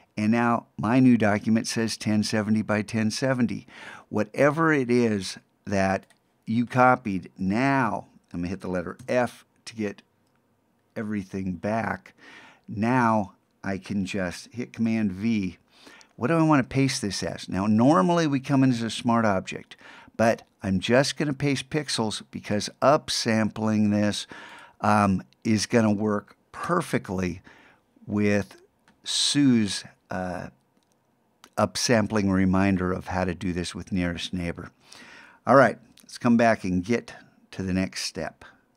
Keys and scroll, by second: 14.9 super+v.